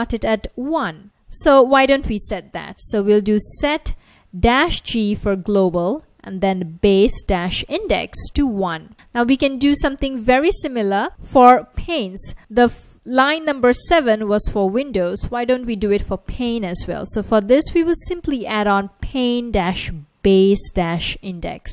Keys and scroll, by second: 1.0 super+Tab, 2.7-8.2 typing, 9.4 shift+super+Left, 10.2 super+c, 11.1 Right, 11.1 Return, 11.5 super+v, 13.9 F1, 16.9-18.6 typing, 19.2 super+s.